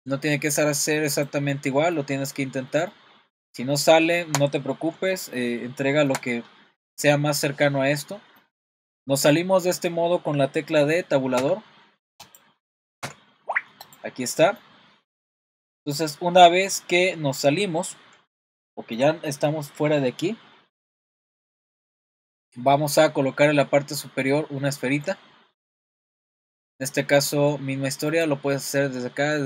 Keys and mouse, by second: 1.7-12.3 middle drag, 12.3 click, 13.1 Tab, 14.3-14.6 middle drag, 18.3-22.1 shift+middle drag, 24.6-25.6 shift+middle drag, 28.2-29.4 drag.